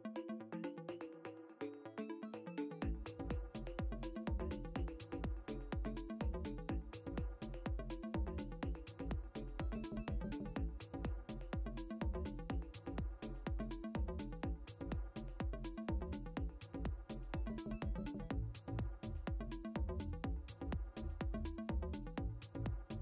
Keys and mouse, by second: 1.4 e, 2.2 click, 3.7 ctrl+z, 5.2 b, 7.7 click, 10.6 click, 16.2 click, 18.7 click, 21.0 click.